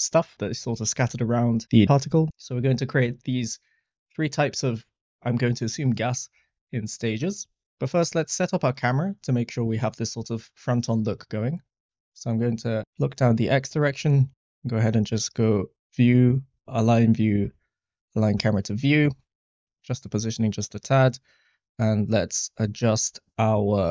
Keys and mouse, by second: 13.1-13.7 shift+middle drag, 15.3-17.5 drag, 19.7 g, 19.7 y, 21.0 click, 22.5 click.